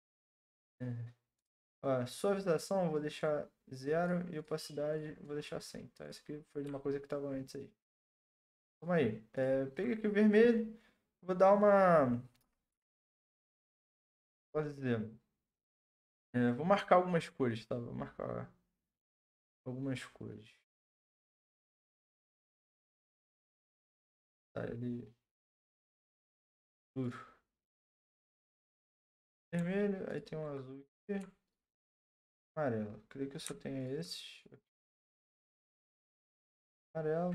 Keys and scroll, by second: 12.8 ], 12.9 ], 13.1 ], 13.3 ], 23.9 ctrl+z.